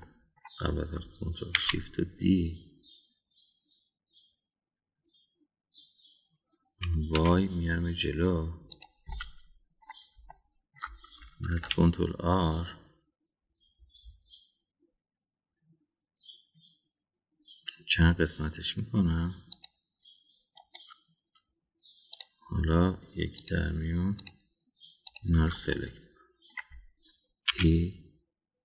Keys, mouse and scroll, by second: 1.0 middle click, 2.5 shift+d, 10.0-10.8 middle drag, 11.3 shift+middle click, 12.5 ctrl+r, 23.1 click, 24.3 click, 25.2 shift+click, 26.0 shift+click, 26.7 middle click, 28.5 e.